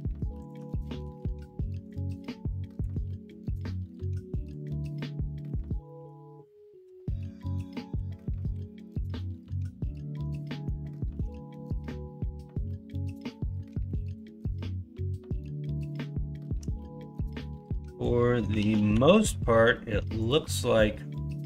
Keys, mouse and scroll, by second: 5.0 middle click, 5.5 scroll down 1, 5.8 scroll up 1, 6.0-7.2 scroll down 1, 7.2 KP_1, 7.9 KP_3, 8.5 KP_9, 9.1 alt+z, 10.8 shift+middle click, 18.4 s.